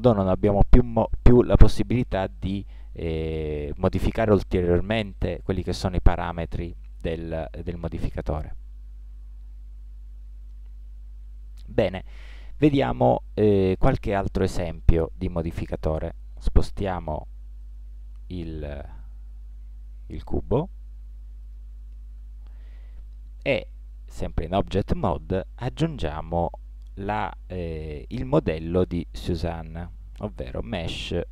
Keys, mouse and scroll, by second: 8.6 middle click, 10.5 Tab, 16.9 g, 26.6 shift+a.